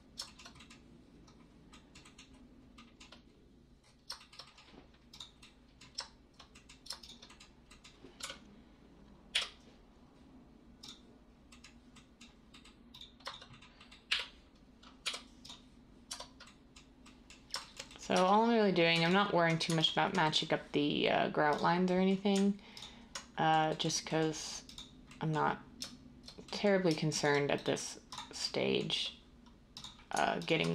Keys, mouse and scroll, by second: 8.1 3, 9.3 u, 14.1 7, 15.0 u, 16.1 Tab, 18.1 Tab.